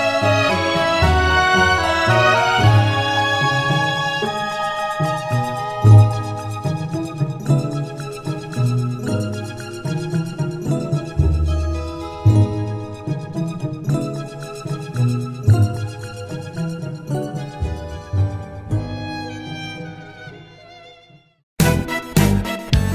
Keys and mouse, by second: 1.7 middle click, 3.4 middle click, 4.4 middle click, 5.4 middle click, 9.5 middle click, 13.7 middle click, 15.4 middle click, 17.2 middle click, 18.1 middle click.